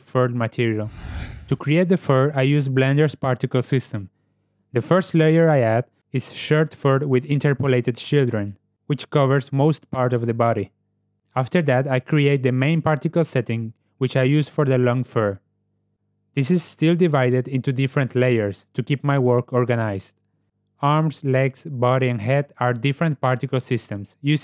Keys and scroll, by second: 3.7 t, 19.8 Tab.